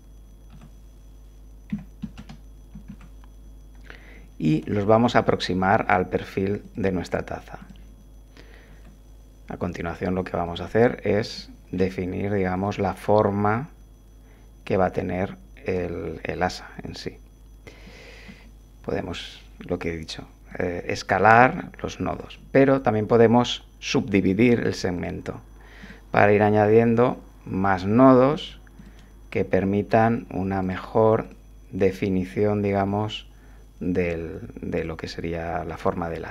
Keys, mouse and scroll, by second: 0.5 r, 1.7 9, 2.0 0, 2.2 Return, 2.9 1, 4.5 g, 6.6 click, 7.6 click, 8.7 g, 10.4 click, 11.3 shift+click, 12.5 click, 18.3 s, 20.5 click, 22.1 shift+click, 24.1 right click, 24.9 click, 25.8 click, 26.6 g, 27.9 click, 28.8 shift+click, 30.6 right click, 31.2 click, 31.8 click, 32.9 g, 34.0 click, 34.8 click, 35.7 r.